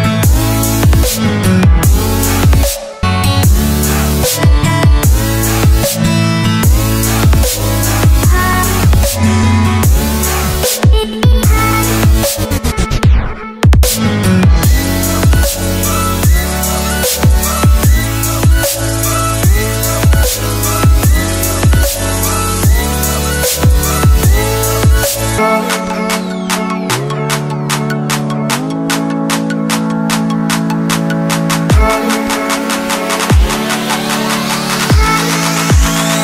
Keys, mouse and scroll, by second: 1.2 Tab, 1.8 click, 2.1 Tab, 2.4 click, 3.8 ctrl+c, 4.1 Tab, 4.8 Tab, 5.2 click, 6.6 c, 7.6 v, 8.1 alt+Tab, 8.5 alt+Tab, 9.4-11.3 typing, 9.6 alt+Tab, 11.7 click, 16.1 click, 18.2 click, 31.1-31.7 scroll down 1, 32.4 Delete, 35.8 click.